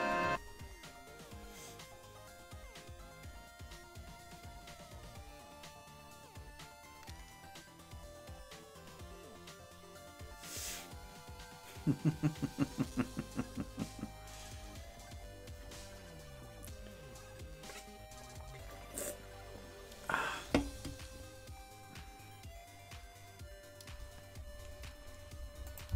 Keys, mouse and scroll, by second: 25.6 click.